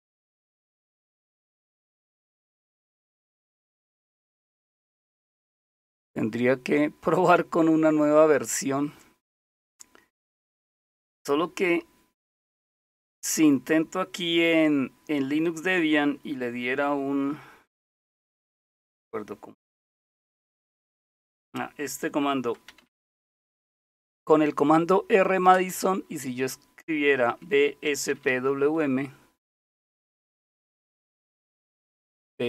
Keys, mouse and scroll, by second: 1.5-2.5 scroll up 3, 2.9-4.0 scroll up 1, 4.0-5.5 scroll down 4, 5.5-6.2 scroll down 1, 12.8 click, 22.3-24.4 typing, 25.5 typing, 27.3-28.8 typing, 30.5 typing, 31.5 Up, 31.5 Left, 31.5 Delete, 31.5 Right.